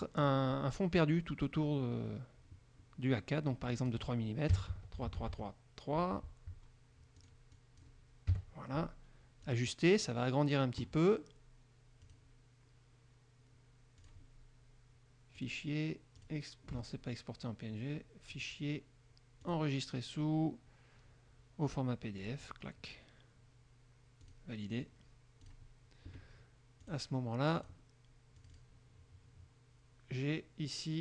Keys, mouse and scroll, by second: 0.3 click, 3.9 click, 4.7 KP_3, 4.9 Tab, 5.2 KP_3, 5.4 Tab, 7.4-8.2 drag, 8.2 click, 8.5 KP_3, 12.2 click, 14.2 click, 15.6 click, 16.4 click, 18.5 click, 19.6 click, 22.4 click, 24.4 click, 25.6 click, 27.0 click, 27.7 click, 28.5 click.